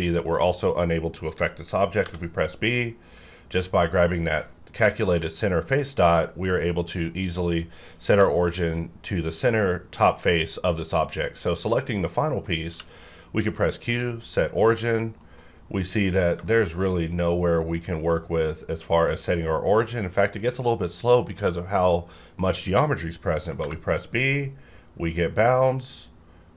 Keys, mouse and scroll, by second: 2.0 b, 6.0 click, 11.1 click, 11.7 middle click, 12.6 q, 13.8 click, 13.8 click, 15.2 middle click, 15.5-16.0 scroll up 1, 16.0-16.4 scroll down 1, 16.5 shift+middle click, 17.2-17.6 scroll up 1, 23.6 b, 24.5 scroll down 1.